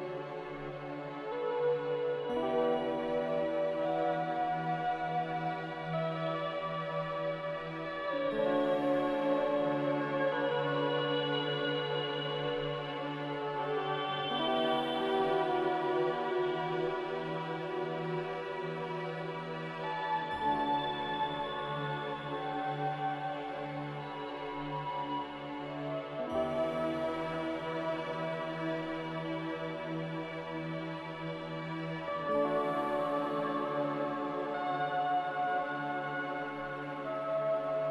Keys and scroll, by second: 13.2 ctrl+z, 17.4 z, 31.5 ctrl+z, 34.4 ctrl+z.